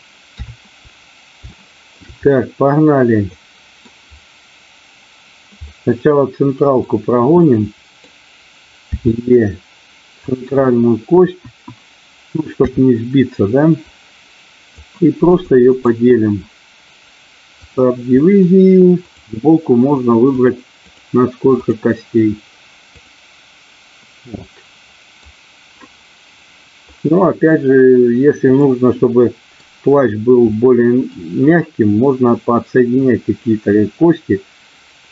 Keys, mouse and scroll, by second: 0.3 KP_3, 1.5 shift+middle click, 3.2 middle click, 5.6-6.7 middle drag, 7.5 middle click, 8.8 e, 10.1 click, 10.6 middle click, 11.5 KP_1, 12.6 KP_3, 13.8-14.8 drag, 15.3 click, 19.0 click, 20.2 click, 20.8 click, 21.7 click, 23.0 click, 24.3 middle click, 28.7 middle click, 30.6 middle click.